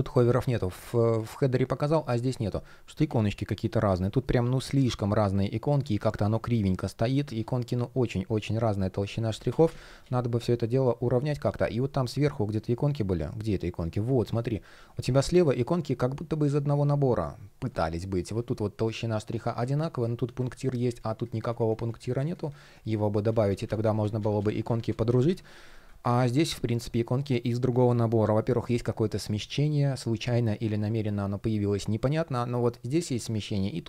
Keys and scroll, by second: 3.7 shift+p, 5.6 super+z, 8.9 super+z, 14.0 shift+p, 19.2 super+z, 20.0 super+z, 22.9 super+z.